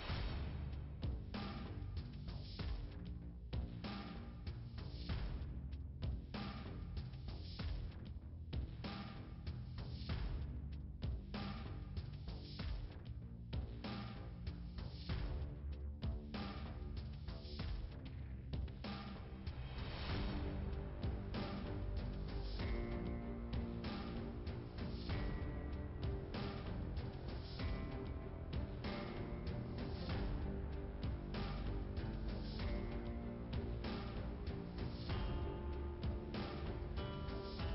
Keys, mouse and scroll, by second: 0.7 click, 9.3 click, 10.3 middle click, 12.9 click, 13.9 click, 14.6 click, 15.6 click, 16.3 click, 18.1 middle click, 19.4 scroll down 1, 20.2 click, 22.8 right click, 24.6 click, 26.7 click, 28.3 click, 28.6 double click, 29.9 double click, 31.5 middle click, 32.8 click, 34.6 click.